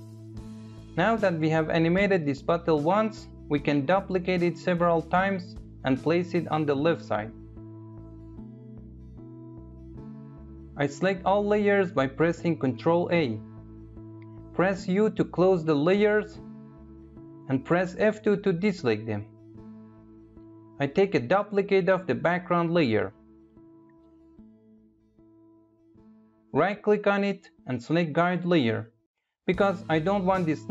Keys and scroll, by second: 11.6 ctrl+a, 14.5 u, 17.3 F2, 21.3 ctrl+d.